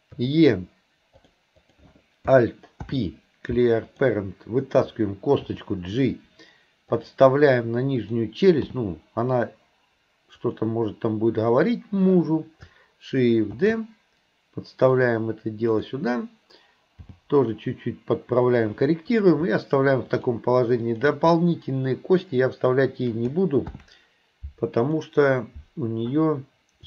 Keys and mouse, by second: 0.2 e, 2.8 alt+p, 5.5 g, 8.7 g, 11.5 click, 13.6 shift+d, 15.7 click, 17.1 g, 19.1 click, 20.1 shift+click, 20.9 shift+click, 23.7 ctrl+p.